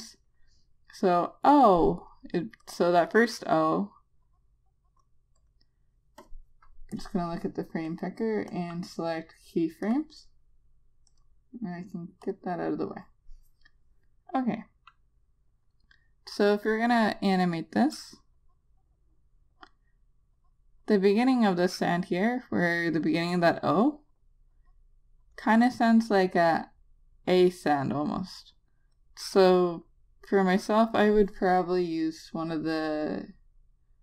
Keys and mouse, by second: 2.9 click, 17.6 click, 22.6 click.